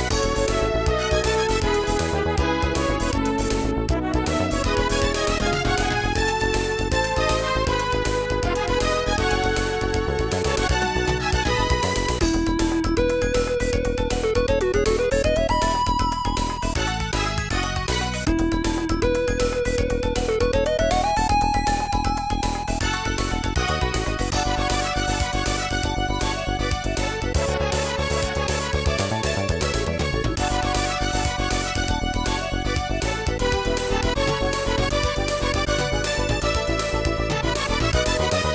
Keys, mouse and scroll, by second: 1.6 click, 2.3 right click, 2.3 click, 2.5 g, 7.5 click, 7.7 click, 9.1 a, 9.4 a, 11.3 click, 15.4 click, 15.5 click, 15.8 click, 15.9 click, 17.8 click, 19.0 ctrl+z, 22.5 right click, 23.2 right click, 23.3 shift+right click, 24.0 right click, 24.1 shift+right click, 24.7 right click, 24.8 shift+right click, 26.8 right click, 26.9 shift+right click, 32.5 click, 33.5 click, 35.5 click, 38.0 click, 38.1 click.